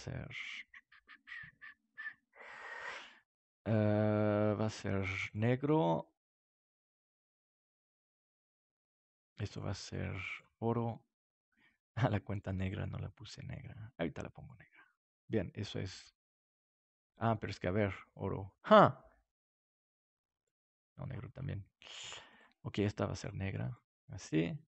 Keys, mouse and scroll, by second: 3.6-5.4 drag, 9.4-24.0 drag.